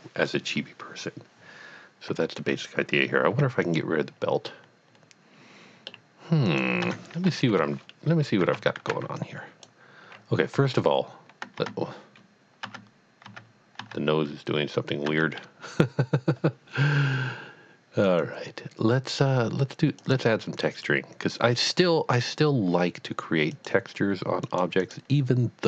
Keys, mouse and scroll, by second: 3.3 x, 3.6 click, 4.4-5.2 middle drag, 5.5-5.9 middle drag, 6.5 click, 6.8 Tab, 7.5 KP_1, 8.1-8.5 scroll down 1, 8.5 alt+a, 8.5 right click, 9.2 click, 11.6 Tab, 12.6 Tab, 13.2 Tab, 13.8 Tab, 15.5 Tab, 18.0 click, 20.0 click, 23.6 click, 24.5 click, 24.8 click.